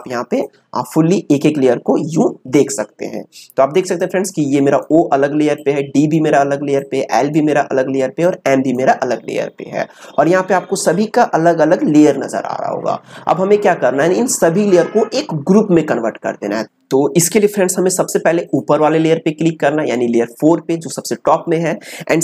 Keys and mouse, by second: 4.0-11.0 drag, 18.5 click.